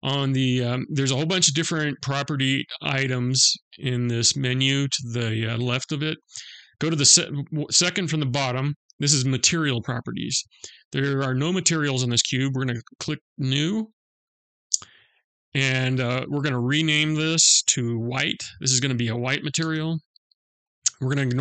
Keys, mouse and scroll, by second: 9.2 click, 12.9 click, 20.5-21.0 scroll down 1, 21.0-21.4 scroll down 3.